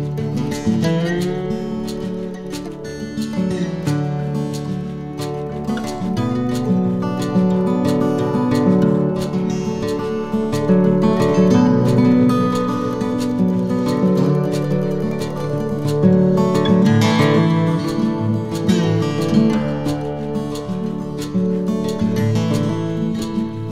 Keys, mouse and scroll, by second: 0.9 s, 5.0 a, 5.9 middle click, 9.2 ctrl+z, 10.6 ctrl+KP_Add, 12.5 shift+middle click, 13.0-13.4 scroll up 2, 13.4 shift+middle click, 14.9 s, 19.4 middle click, 21.9 z, 22.2 middle click, 22.8 z, 22.9 scroll down 1, 23.5 shift+middle click.